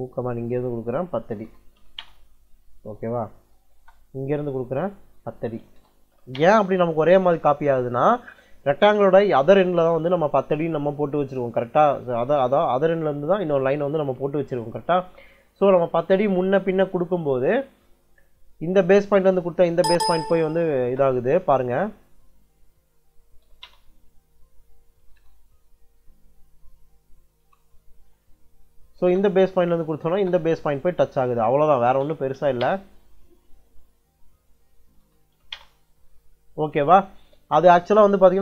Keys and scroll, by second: 0.9-2.1 typing, 3.6 space, 5.2-6.5 typing, 19.6 m, 19.8 space, 20.5 m, 20.7 space, 22.6-25.7 typing, 27.3 Return, 28.8 space, 31.4-32.7 typing, 34.5-35.7 typing.